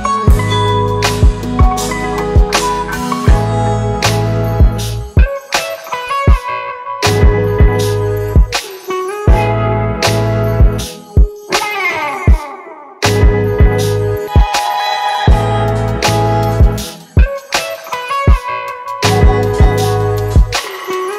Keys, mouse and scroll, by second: 1.8 ctrl+z, 4.1 double click, 8.5 ctrl+z, 12.5 alt+click.